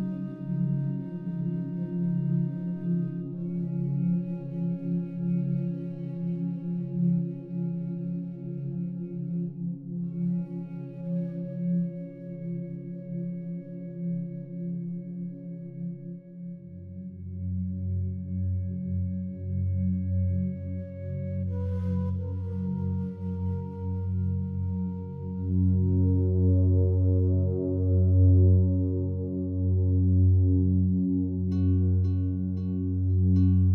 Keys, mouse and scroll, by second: 0.1-1.4 drag, 1.6-3.2 drag, 3.3-5.5 drag, 5.6 click, 6.0 click, 6.8-8.3 typing, 9.8-12.4 drag, 12.9-13.8 drag, 13.8 click, 14.0-15.9 drag, 15.6-19.2 typing, 20.6-21.3 typing, 23.4-24.6 typing, 26.8 Escape, 27.7-29.0 drag, 29.0 b, 30.1-33.7 drag.